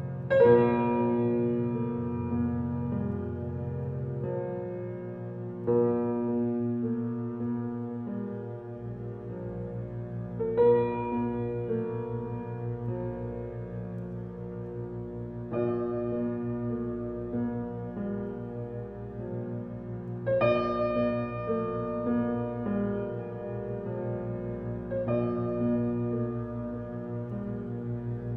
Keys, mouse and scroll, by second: 0.6 click, 1.8 click, 2.0 click, 2.7 click, 5.1-6.1 drag, 7.5-10.8 drag, 13.4 shift+click, 15.2 shift+l, 16.4 shift+l, 16.5 shift+click, 16.6-17.0 shift+l, 18.1 click, 18.7 click, 20.7 click, 21.1 click, 22.5 click, 22.8 click, 23.8 ctrl+z, 24.2 click, 24.6 click, 26.0 click, 26.3 click, 27.8 drag, 28.2 click.